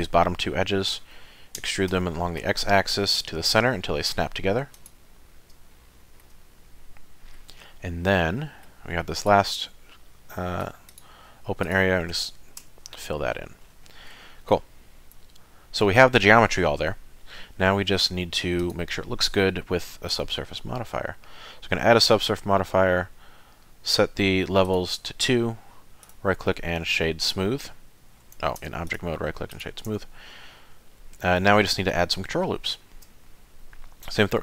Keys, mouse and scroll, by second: 1.6 e, 5.7 shift+middle click, 6.6 middle click, 8.0 middle click, 9.2 click, 9.8 middle click, 10.9 click, 11.6 shift+click, 12.6 f, 13.1 middle click, 13.6 scroll down 4, 14.2 shift+middle click, 14.6 middle click, 18.6 click, 24.7 click, 26.0 right click, 28.6 Tab, 28.9 right click, 29.9 Tab, 30.3 middle click, 32.0-32.5 scroll up 2, 32.6 shift+middle click, 33.3 middle click.